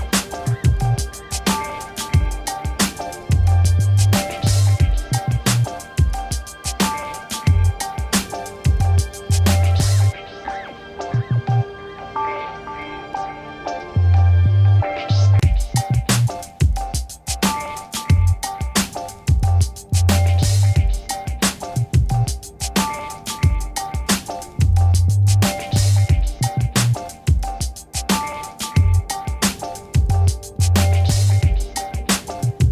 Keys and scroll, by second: 3.9 8, 4.1 9, 4.7 shift+., 6.2 0, 7.3 Return, 8.3 v, 9.5 ctrl+a, 9.8 v, 11.5 ctrl+d, 15.4 t, 30.4 3, 30.9 Return.